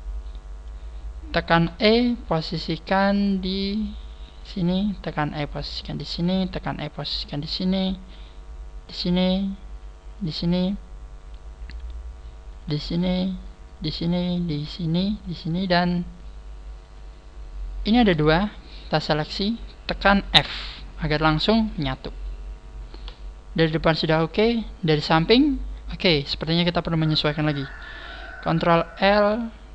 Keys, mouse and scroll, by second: 0.9-1.3 scroll down 5, 1.6 e, 5.9 click, 6.0 e, 7.2 click, 8.9 click, 9.1 e, 10.3 click, 10.4 e, 13.8 click, 16.9 click, 17.3-17.8 scroll up 6, 18.7 shift+right click, 20.5 f, 21.0-21.5 scroll down 4, 22.5-23.2 scroll down 3.